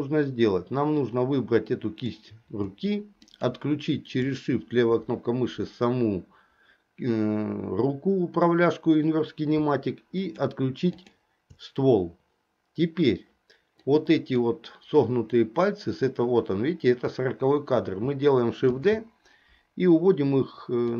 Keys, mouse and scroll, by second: 1.1-2.3 drag, 3.4 shift+click, 10.3 shift+click, 11.1 shift+click, 13.9 click, 18.8 shift+d.